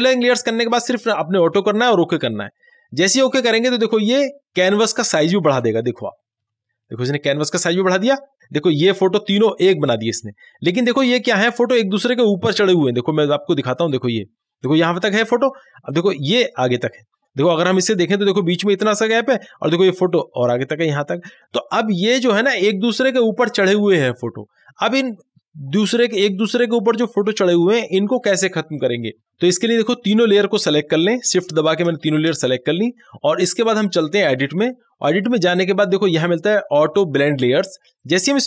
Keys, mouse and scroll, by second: 2.4 click, 6.0 click, 8.4-9.3 alt+scroll down 1, 12.9 click, 20.1 click, 25.9-29.2 drag, 31.3 scroll down 1, 32.1 shift+click, 34.4 click, 38.2-38.4 drag.